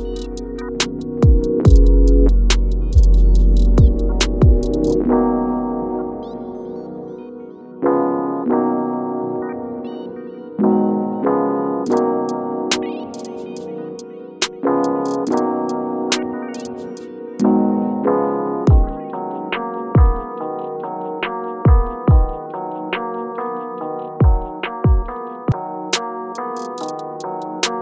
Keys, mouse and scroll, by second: 0.5-1.0 shift+scroll up 1, 1.4 click, 3.1 scroll up 1, 3.7 click, 5.7-8.1 shift+drag, 8.1 scroll down 1, 8.9 click, 11.2-16.5 ctrl+drag, 17.8 right click, 18.4 scroll up 1, 19.5-22.2 drag, 22.2 shift+scroll up 1, 23.3-25.7 shift+drag, 25.7-27.8 shift+drag.